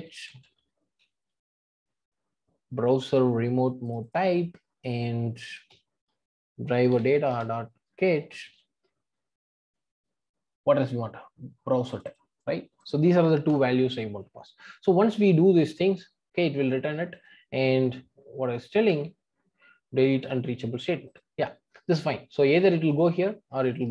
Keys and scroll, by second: 7.3 Return, 18.8 alt+Return.